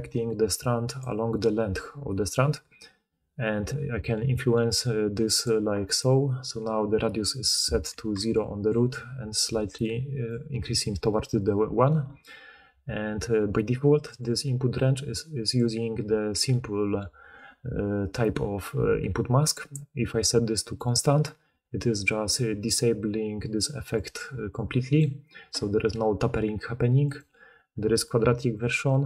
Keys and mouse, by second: 5.4-8.1 drag, 7.9-11.9 typing.